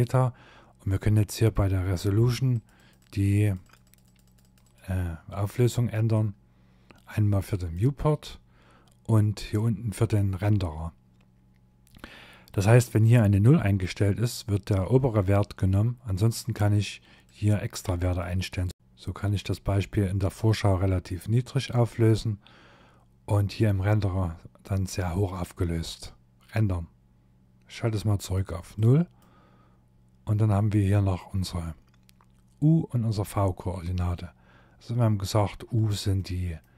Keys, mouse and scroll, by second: 1.5 click, 1.7 click, 2.0 click, 2.2 click, 2.4 click, 2.6 click, 2.8 click, 16.2 click, 17.0 click, 27.4 click, 27.7 click, 35.2 middle click.